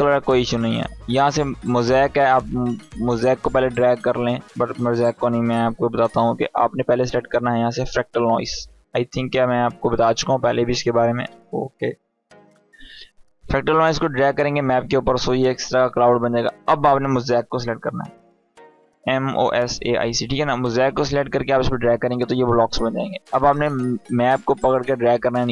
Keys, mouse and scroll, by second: 1.8-3.0 drag, 4.6 BackSpace, 7.3-7.7 typing, 9.1-9.8 typing, 10.9 BackSpace, 12.9-14.1 drag, 17.1-18.6 typing, 20.4-21.3 drag, 24.0-24.6 drag.